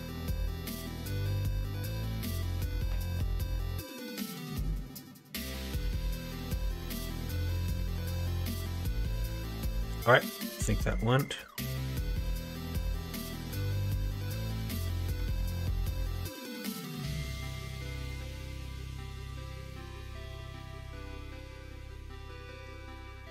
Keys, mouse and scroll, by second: 9.4 middle click, 10.7 middle click.